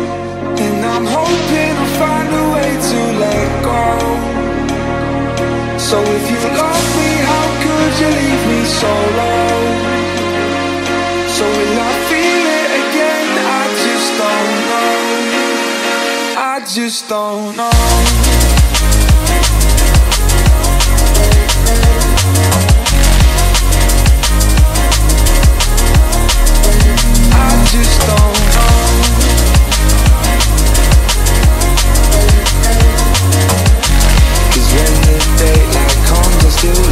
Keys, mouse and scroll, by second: 0.7-1.1 scroll up 1, 1.4-4.3 middle drag, 4.3 space, 5.2-7.6 drag, 9.1 shift+d, 10.6 shift+d, 14.9 click, 19.2-25.8 drag, 28.0-32.8 drag, 32.8 BackSpace, 33.0 BackSpace.